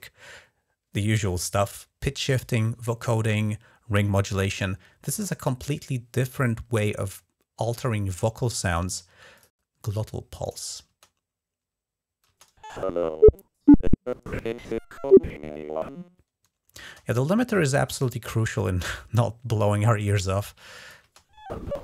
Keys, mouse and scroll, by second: 9.1 click, 10.2 click, 10.6 space, 12.0 space, 16.6 space, 20.2 click, 20.8 space.